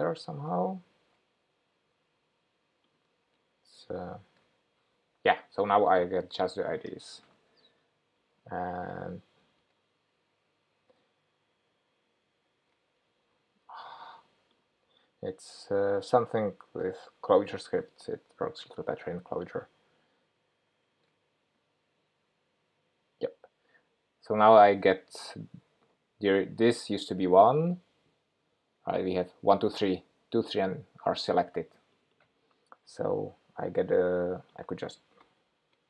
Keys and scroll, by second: 11.4 shift+super+p, 16.0 shift+super+p, 20.2 shift+super+p.